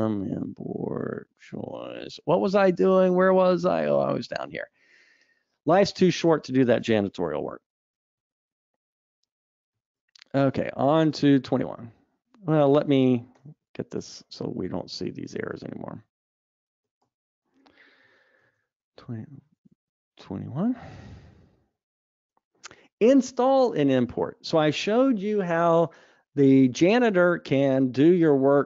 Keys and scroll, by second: 0.1 Tab, 9.0 alt+Up, 10.2 super+Up, 13.5 Escape, 14.0 super+z, 14.6 super+z, 15.3 super+z, 16.0 super+z, 18.5 super+z, 18.6 super+Up.